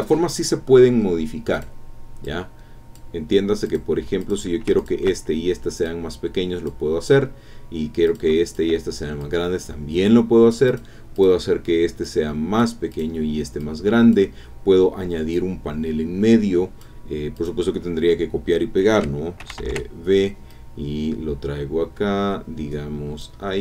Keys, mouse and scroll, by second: 1.0-1.3 scroll down 1, 1.5 click, 2.2 click, 3.6 click, 4.2 click, 4.8 shift+click, 5.8 click, 8.0 click, 8.5 shift+click, 9.2-11.0 drag, 11.1 click, 12.0 click, 12.9 click, 13.6 click, 15.3 click, 17.3 click, 19.4 ctrl+c, 19.6 ctrl+v, 20.5-23.4 drag.